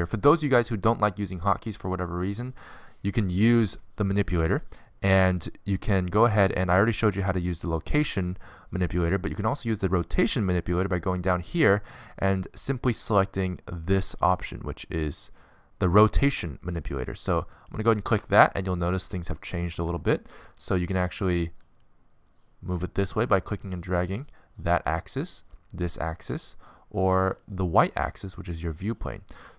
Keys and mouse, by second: 17.9-19.7 drag, 21.1 middle click.